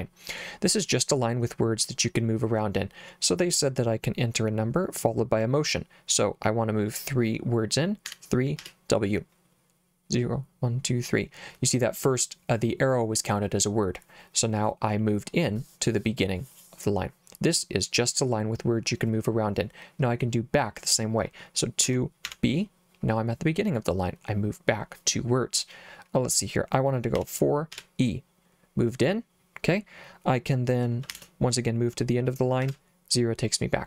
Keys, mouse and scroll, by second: 8.1 3, 8.6 w, 21.9 2, 22.3 b, 27.2 4, 27.8 e, 31.2 shift+4, 32.7 0.